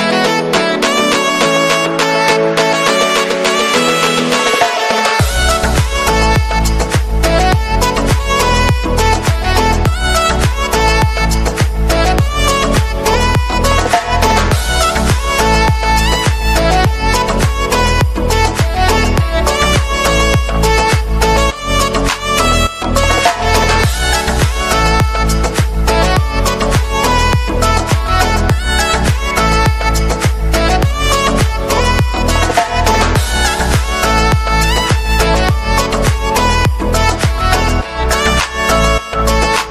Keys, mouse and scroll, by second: 2.2 right click, 4.7 right click, 4.8 right click, 9.4 right click, 11.0 right click, 12.9 right click, 13.2 right click, 15.3 right click, 15.7 right click, 19.2 right click, 33.2 right click, 33.9 right click, 35.7 right click, 36.1 right click, 37.0 middle click, 37.2 right click, 38.7 right click.